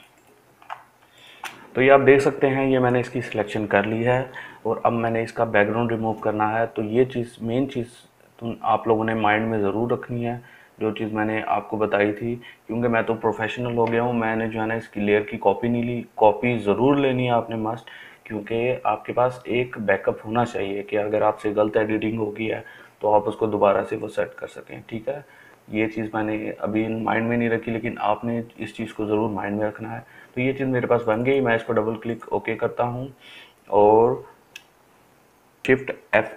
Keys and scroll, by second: 36.2 shift+F8.